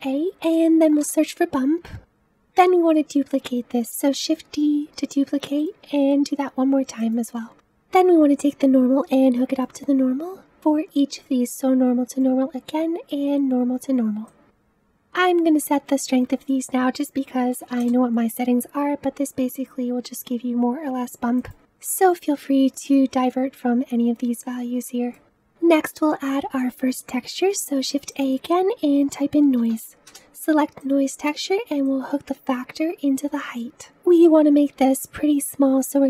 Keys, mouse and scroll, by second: 0.0-3.9 shift+middle drag, 3.9 shift+d, 5.9 shift+d, 12.2 click, 14.8-21.5 drag, 21.5 KP_5.